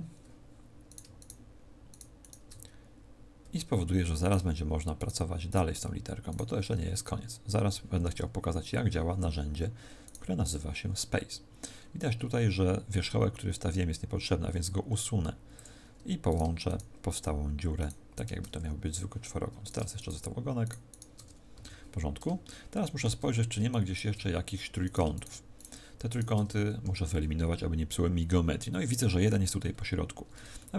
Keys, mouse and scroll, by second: 0.7 scroll up 2, 0.8 right click, 1.0 shift+right click, 1.8 right click, 2.7 shift+right click, 3.3 f, 4.1 right click, 4.8 shift+right click, 5.4 right click, 6.2 shift+right click, 6.7 f, 7.4 a, 10.0 right click, 11.6-13.1 scroll up 7, 13.1 scroll down 2, 13.2-14.0 scroll down 6, 14.4 x, 16.2 right click, 16.6 shift+right click, 18.1 shift+right click, 18.4 f, 19.6 right click, 19.8 shift+right click, 21.2 f, 21.4 a, 21.9-22.4 scroll down 3, 22.4 shift+middle click, 23.2-23.6 scroll down 1, 23.6 shift+right click, 24.7 right click, 25.0 shift+right click, 25.4 shift+right click, 26.4 f, 26.7 a, 29.6-30.4 scroll up 1, 30.4 shift+middle click, 30.4 scroll up 2.